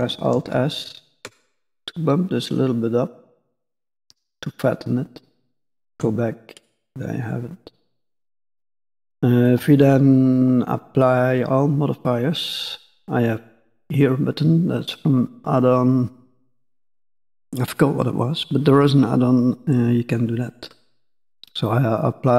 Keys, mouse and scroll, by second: 0.3 alt+s, 5.8 Tab, 6.4 middle click, 9.3-13.5 scroll up 21.